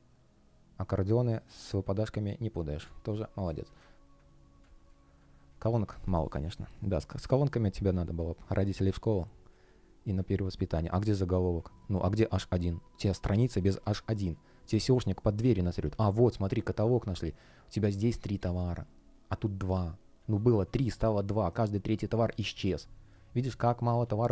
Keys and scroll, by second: 1.5 space, 3.1 space, 4.5 space, 7.8 space, 11.2 space, 11.6 shift+p, 13.5 space, 18.4 space, 23.9 super+z.